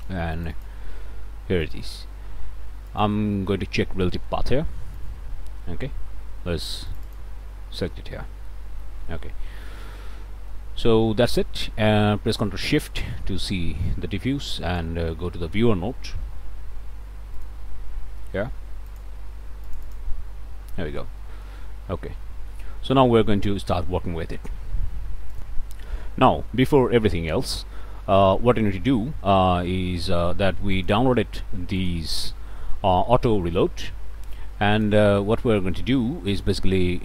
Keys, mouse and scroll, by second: 0.0 click, 1.7 click, 2.9 click, 6.9 click, 8.5 click, 8.6 middle click, 9.2 scroll down 1, 9.9 middle click, 12.9 ctrl+shift+click, 14.7 click, 16.3 v, 17.4 click, 18.1-18.4 scroll up 2, 18.9 ctrl+shift+click, 19.7 ctrl+shift+click, 20.7 ctrl+shift+scroll down 1, 21.2 click, 21.6 scroll up 1, 21.9 scroll down 1, 22.2 click, 25.4 click, 28.9-30.8 middle drag, 30.8 click, 31.7 click, 34.7 click.